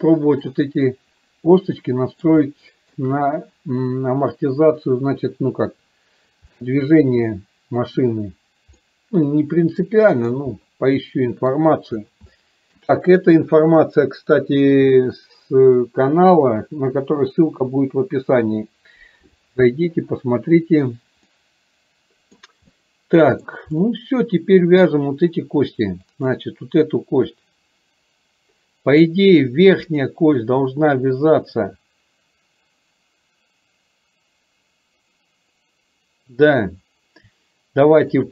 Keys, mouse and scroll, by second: 0.4 middle click, 1.9-2.3 scroll up 1, 2.5-3.0 shift+scroll up 1, 3.0 shift+middle drag, 6.7-8.0 middle drag, 8.9-10.4 middle drag, 11.0-11.5 scroll up 1, 12.4-12.8 shift+scroll up 1, 21.4-22.5 middle drag, 22.8-23.7 middle drag, 23.9-25.0 middle drag, 29.9 click.